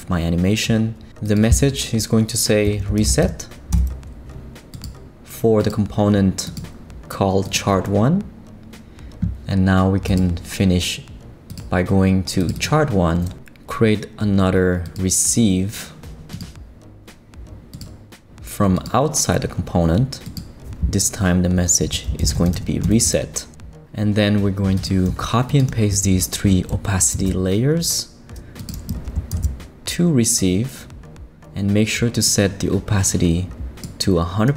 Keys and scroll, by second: 2.4-3.7 typing, 27.1 super+c, 29.3 super+v.